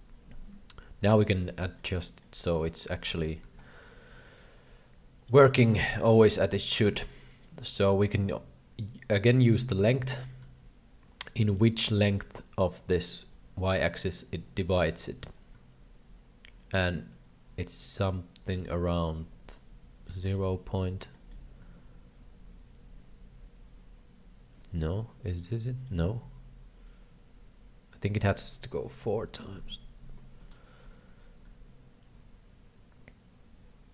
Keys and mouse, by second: 0.0 KP_3, 0.0 KP_5, 0.0 KP_7, 1.4 middle click, 1.6 middle click, 2.1 middle click, 2.5 middle click, 3.1 shift+middle click, 3.5 shift+middle click, 4.2-9.6 drag, 11.0-15.1 shift+drag, 16.3-19.1 shift+drag, 19.5 middle click, 20.2 shift+middle click, 21.1 shift+middle click, 22.3-24.5 shift+drag, 24.7-25.9 middle drag, 26.8-28.2 shift+drag, 29.0 KP_7, 30.4 KP_7, 32.1-33.9 shift+drag.